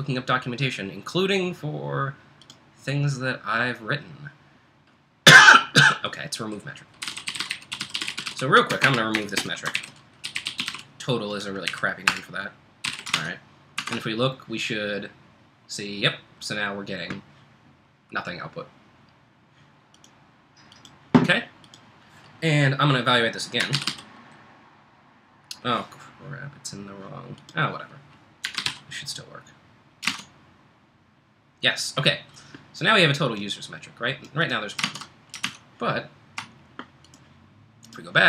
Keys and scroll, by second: 6.8-11.2 typing, 11.7 Right, 12.1 Return, 12.5-13.4 typing, 13.8 super+Tab, 23.4-25.4 typing, 28.2-29.2 typing, 30.1 super+Tab, 34.9 super+Tab, 36.0 super+Tab.